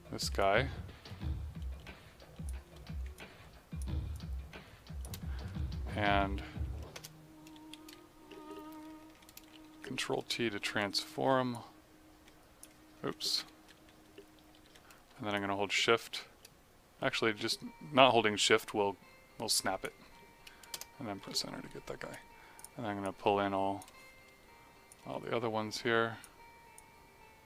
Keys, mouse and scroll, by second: 0.4 click, 3.1 click, 4.1 click, 6.9 Return, 9.7 t, 11.5 click, 12.9 z, 13.4 Escape, 14.6 t, 15.3 click, 20.7 Return, 22.5 click.